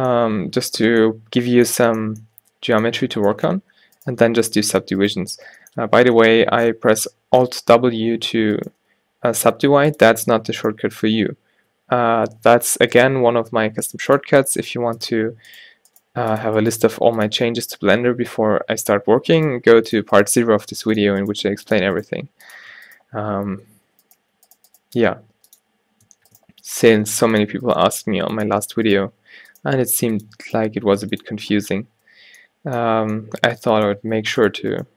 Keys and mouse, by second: 0.0 a, 0.9 Tab, 8.0 alt+w, 8.6 click, 8.8 g, 12.4 alt+w, 13.2 g, 14.6 g, 16.1 g, 16.9 g, 19.2 alt+w, 19.6 g, 20.3 g, 21.4 g, 22.1 g, 23.7 alt+w, 24.3 g, 24.9 g, 27.2 g, 27.9 g, 29.3 alt+w, 29.7 g, 30.6 g, 31.4 Tab, 32.1 a, 32.3 a, 32.9 a, 34.2 Tab.